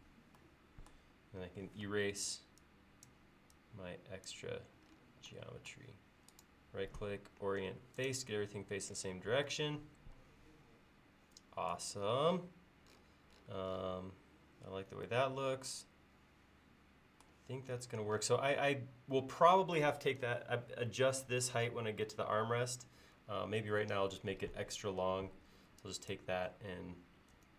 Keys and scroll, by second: 2.1 e, 25.6 space, 27.4 m.